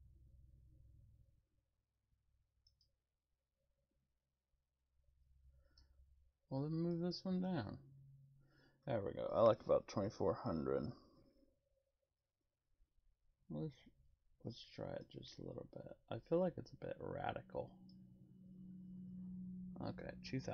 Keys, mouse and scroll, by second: 2.6 click, 5.8 click, 6.0 right click, 6.2 click, 15.0 click, 17.0 click.